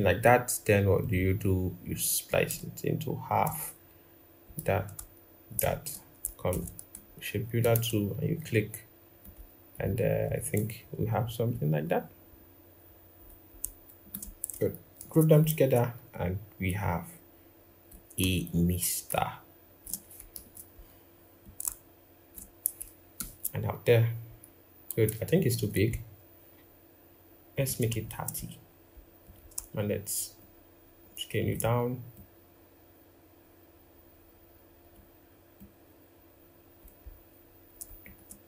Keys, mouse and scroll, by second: 5.2 shift+click, 6.2 m, 7.4 alt+click, 10.6 Down, 10.7 Down, 11.1 Down, 11.2 Down, 11.6 Down, 12.0 Up, 12.6 Down, 12.9 Down, 13.7 shift+click, 14.7 ctrl+g, 18.7 shift+click, 20.1 ctrl+-, 22.9 ctrl+0, 25.0 ctrl+=, 25.2 ctrl+=, 27.8 shift+Down, 30.1 shift+click, 37.8 shift+Up, 38.3 Down.